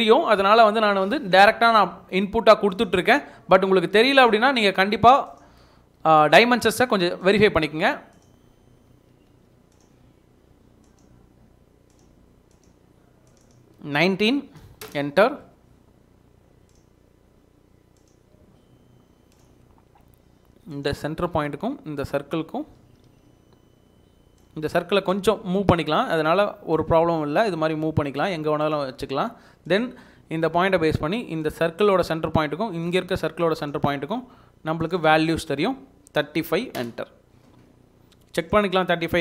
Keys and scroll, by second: 6.2 Escape, 6.8 Escape, 8.9 Escape, 9.4 Escape, 14.1-15.1 typing, 18.4 Escape, 18.5 Escape, 22.8 Escape, 23.2 Escape, 23.4 Escape, 25.5 Escape, 25.9 Escape, 36.0-37.0 typing, 37.5 Escape.